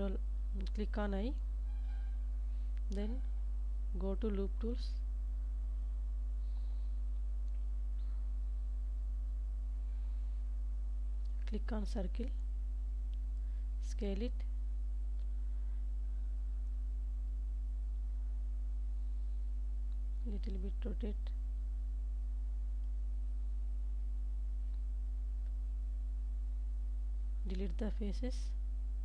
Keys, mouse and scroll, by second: 0.0 click, 6.4 2, 10.1 click, 11.4 click, 13.8 s, 15.1 shift+z, 19.5 click, 20.4 r, 23.7 click, 24.6 s, 26.0 shift+click, 26.5 middle click, 27.8 e, 28.4 z.